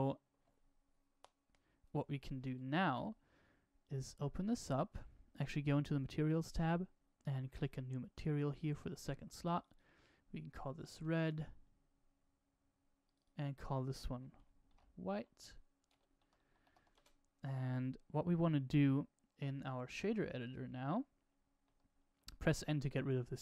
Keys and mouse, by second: 3.7-7.8 drag, 9.5-11.6 drag, 13.0-17.6 drag, 19.5-20.9 drag, 21.6 n, 22.1 n.